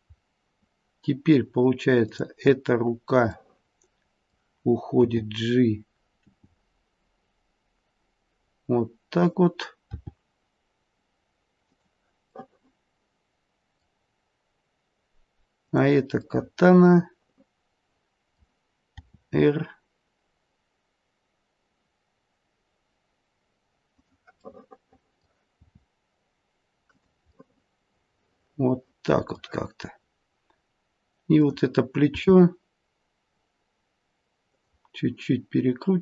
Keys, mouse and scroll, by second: 2.0 click, 3.3 middle click, 4.9 g, 6.2 g, 9.8 r, 12.3 middle click, 15.6 click, 16.2 middle click, 19.0 r, 24.4 middle click, 25.6 r, 27.2 middle click, 31.2 click, 32.1 r.